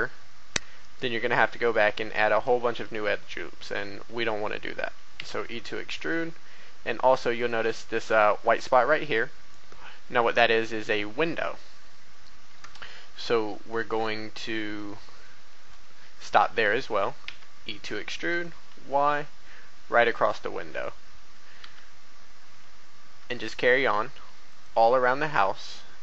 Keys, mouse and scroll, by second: 0.7 shift+middle click, 1.9 shift+a, 2.4-4.2 drag, 5.1 e, 5.4 y, 7.3 click, 7.9 shift+middle click, 11.0 scroll down 1, 12.8 shift+middle click, 17.2 e, 18.2 y, 20.1 click, 21.6 e, 23.2 y, 24.4 click.